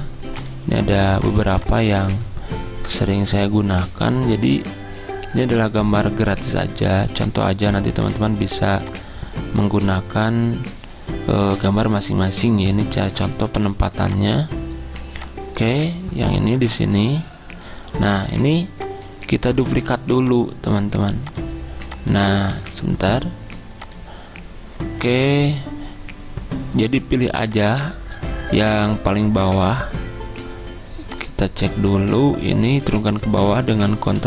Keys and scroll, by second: 2.2 alt+Tab, 3.2 alt+Tab, 19.8 ctrl+z, 22.6 ctrl+z, 33.6 ctrl+Page_Down, 33.8 ctrl+Page_Down.